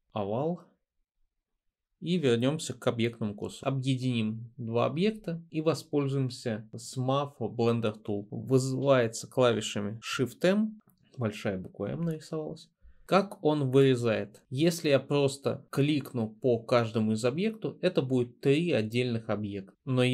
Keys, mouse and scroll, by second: 0.1 l, 3.5 v, 10.8 m.